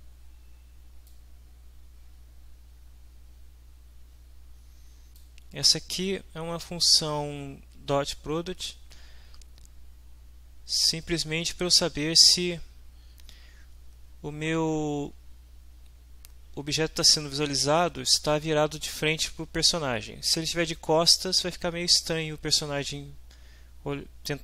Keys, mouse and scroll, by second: 1.1-5.3 drag.